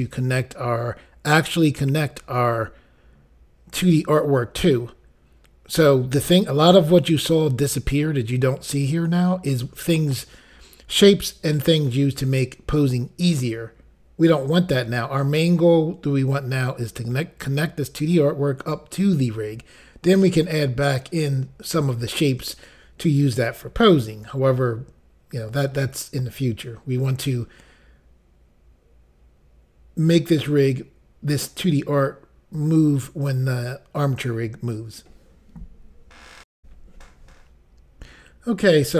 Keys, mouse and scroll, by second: 36.6 Pause.